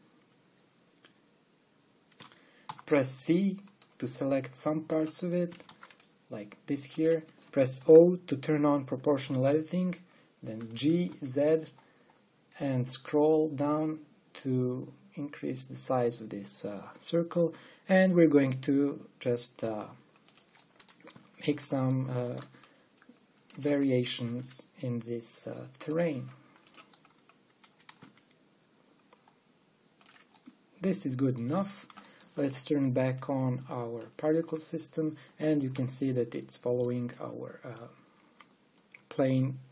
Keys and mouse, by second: 2.8 a, 3.3 c, 6.2 a, 6.4 c, 8.4 o, 11.3 g, 21.3 click, 21.8 a, 22.9 v, 23.1 c, 25.0 g, 27.3-29.5 right drag, 31.2-35.7 middle drag, 32.2 Tab, 36.9 middle click, 37.1 click, 39.1 middle click, 39.4 click, 39.5 middle click.